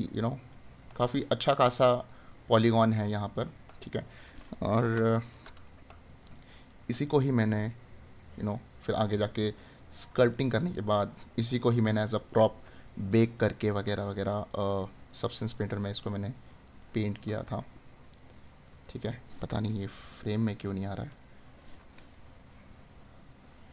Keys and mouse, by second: 21.2 right click.